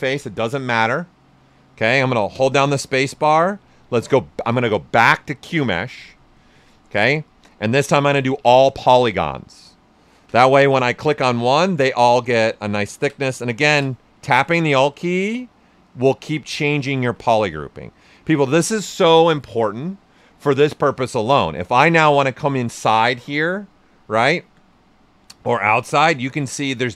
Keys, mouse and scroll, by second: 2.3-3.2 typing, 5.5 space, 8.1 click, 8.4 space, 11.0 right click, 11.5-21.7 drag, 21.7-26.9 right drag.